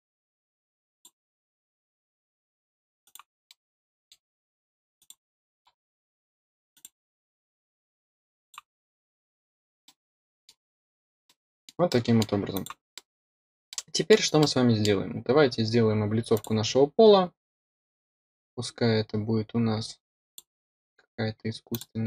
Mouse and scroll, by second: 0.1 middle click, 0.7-3.7 drag, 3.7 middle click, 4.2 click, 4.4-4.9 scroll up 4, 5.1-6.0 drag, 6.0 middle click, 6.2 click, 6.4 middle click, 6.6 middle click, 6.8 middle click, 7.1 middle click, 7.5 click, 7.7 middle click, 8.0 middle click, 8.3 middle click, 8.4-9.2 drag, 9.2 scroll down 1, 9.4 click, 9.7 middle click, 11.0 click, 11.2-11.6 middle drag, 11.8-12.1 middle drag, 12.5 click, 12.9 middle click, 13.6-14.0 middle drag, 16.3 click, 20.2 click, 21.6 click.